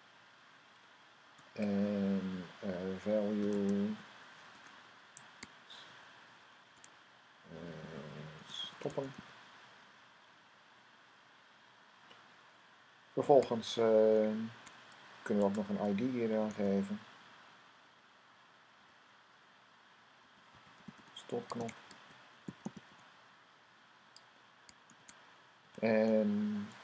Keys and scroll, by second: 2.9-4.2 typing, 5.5-9.5 typing, 10.6 Right, 13.5 Right, 15.4-16.9 typing, 18.8 typing, 19.9-23.3 typing, 24.6 typing.